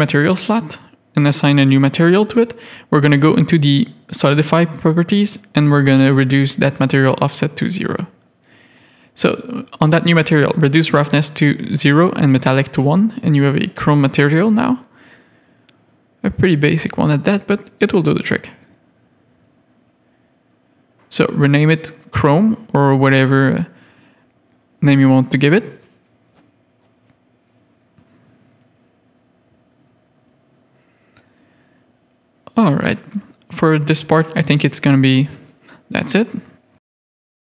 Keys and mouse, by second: 2.0 click, 2.6 click, 4.9 click, 6.6 click, 8.4 click, 10.4 click, 12.2 Tab, 12.5 middle click, 13.5 middle click, 14.1 Tab, 14.6 click, 14.8 3, 19.6 click, 20.8 click, 21.7-23.0 drag, 23.8 Tab, 24.3 middle click, 25.1-26.9 middle drag, 27.2 shift+middle click, 28.6 middle click, 29.2-31.3 middle drag, 31.5 shift+middle click, 33.9 middle click, 34.5 middle click, 35.4 shift+middle click, 35.9-37.0 middle drag, 37.3 middle click.